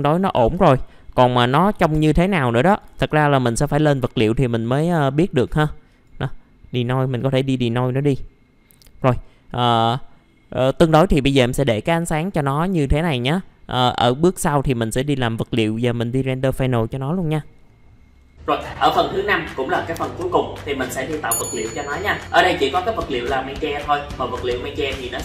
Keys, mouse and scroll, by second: 0.3 KP_6, 2.4 click, 2.9 KP_5, 5.9 click.